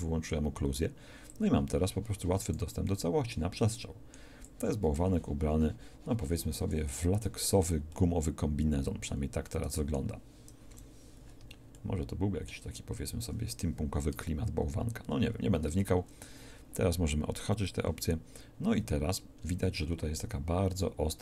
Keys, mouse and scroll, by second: 1.3-2.6 drag, 10.7 KP_1, 14.1 Tab, 15.7 Tab.